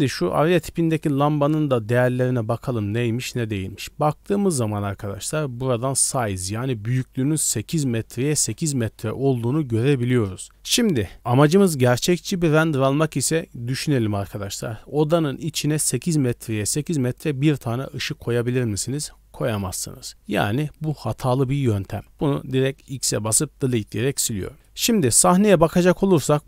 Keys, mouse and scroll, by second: 0.5 click, 2.0 click, 3.2 click, 24.3-25.1 scroll up 5, 24.5 middle click, 25.3 middle drag, 26.1 shift+middle drag.